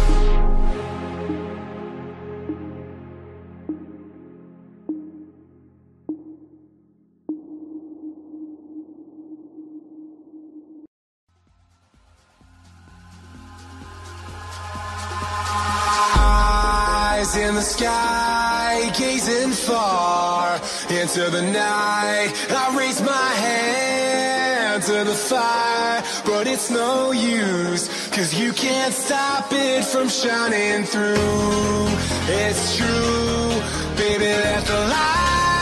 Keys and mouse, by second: 0.4 click, 1.7 click, 2.3 click, 3.6 click, 5.6 click, 5.8 click, 5.9 click, 9.0 click, 11.5 click, 12.7 click, 16.3 click, 18.9 click, 25.5 click, 29.8 click, 33.0 click.